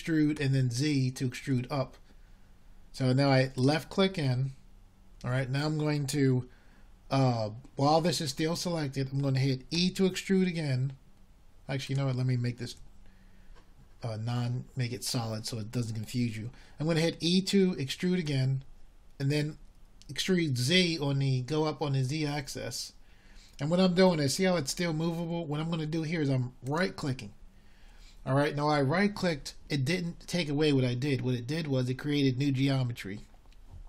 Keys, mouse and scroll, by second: 0.1 a, 0.4 a, 4.2 e, 14.6 e, 17.5 z, 23.3 e.